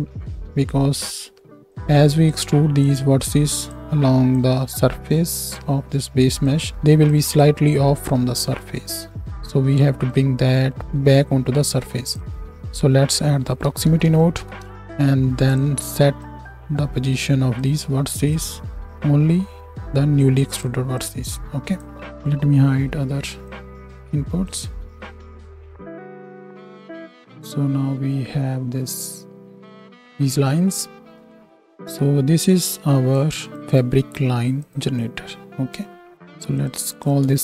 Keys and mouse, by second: 1.1 click, 15.6-22.0 drag, 22.0 ctrl+right click, 22.7 ctrl+h, 23.4-25.0 middle drag, 25.4 shift+Right, 25.4 shift+Left, 25.8 space, 30.4 space, 31.7 Tab, 33.1 middle click, 33.5-34.6 drag, 34.6 middle click, 34.7 click, 35.0-36.7 middle drag, 36.7 click, 36.9-37.4 middle drag.